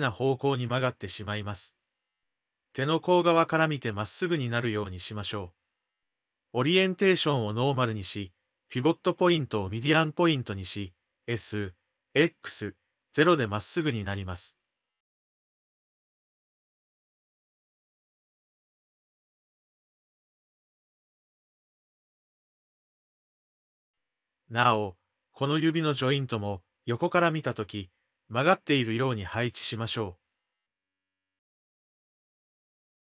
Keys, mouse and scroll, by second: 0.4 drag, 1.0 click, 1.3 Tab, 1.8 shift+click, 3.2 click, 4.1 click, 4.5 d, 4.8-6.4 drag, 6.4 d, 6.5 d, 7.9-10.6 drag, 11.4 click, 12.2 shift+click, 14.0 s, 16.2 click, 16.6 ctrl+l, 17.2 ctrl+l, 18.5 s, 20.6 ctrl+l, 21.1 s, 22.4 ctrl+l, 22.9 s, 24.4-26.6 drag, 26.8 shift+click, 30.2 click, 30.5 g, 32.0 click, 32.2 g, 32.7 click.